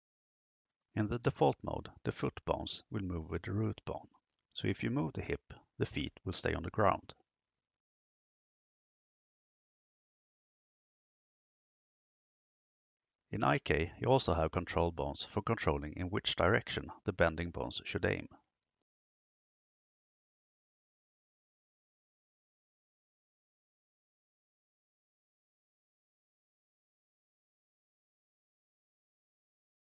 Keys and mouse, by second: 1.4-1.8 shift+middle drag, 3.0 right click, 4.8 g, 10.9 KP_0, 16.5 right click, 18.9 g, 23.9 click, 24.6 right click, 25.1 g.